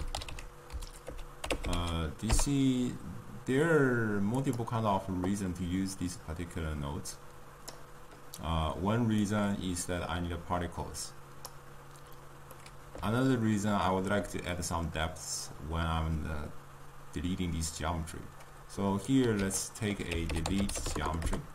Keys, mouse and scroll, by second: 7.8-12.5 drag, 12.5-21.5 middle drag.